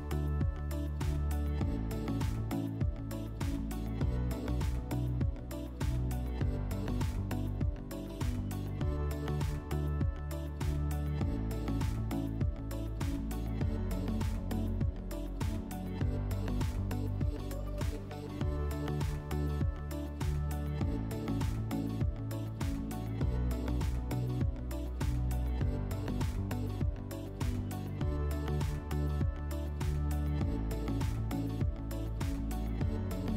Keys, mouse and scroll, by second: 2.8 click, 6.8 click, 7.5 click, 8.3 click, 8.6 r, 11.8-13.6 drag, 16.4-17.9 drag, 20.6-21.7 drag, 24.1-25.7 drag, 25.9-27.4 drag.